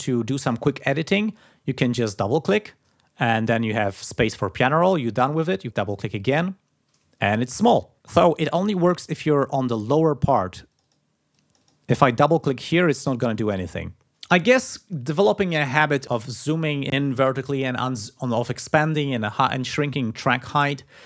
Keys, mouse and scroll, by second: 3.8-4.8 drag, 5.2 click, 9.6 click, 10.7 click, 11.3 click, 12.1 click, 12.7-13.9 drag.